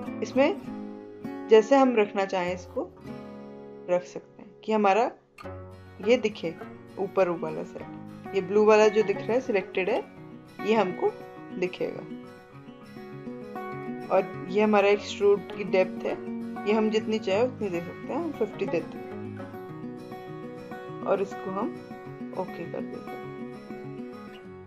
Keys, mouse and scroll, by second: 0.4 click, 0.6-3.0 drag, 10.4-12.6 drag, 23.2 click, 23.4 click.